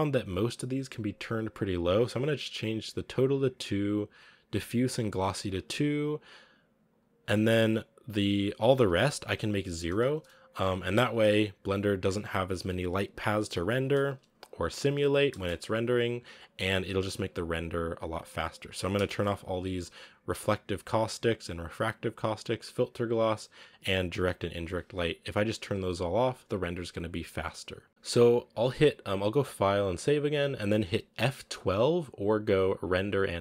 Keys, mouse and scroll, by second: 3.1 click, 4.7 click, 5.7 click, 7.2 click, 9.9-16.2 drag, 16.2 scroll down 4, 17.0 click, 17.9 click, 18.8-25.3 drag, 25.3-26.8 scroll up 3, 26.8 scroll up 1, 27.9 z.